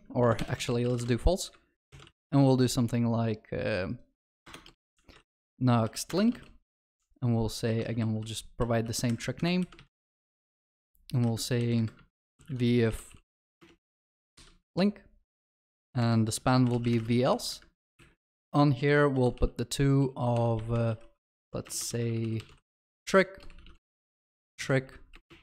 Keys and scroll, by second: 0.3 Return, 2.0 ctrl+s, 6.1 Return, 7.8 ctrl+w, 9.7 ctrl+c, 13.6 ctrl+v, 17.4 ctrl+s.